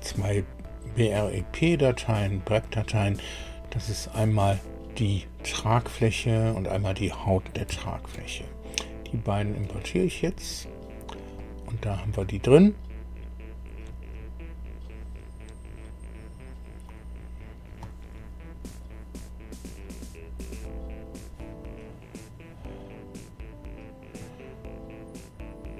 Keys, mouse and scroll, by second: 3.7 click, 7.8 ctrl+click, 9.2 click, 11.3 middle click.